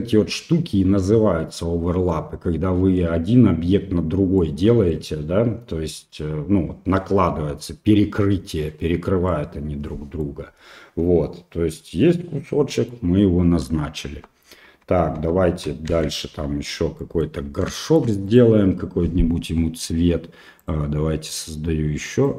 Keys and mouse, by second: 2.1 middle click, 4.4 middle click, 9.3 middle click, 12.7 middle click, 14.0 Tab, 14.2 Tab, 14.9 Tab, 15.2 Tab, 16.0 shift+z, 16.3 Tab, 17.0 middle click, 17.8 shift+middle click, 18.3 right click, 20.6 click.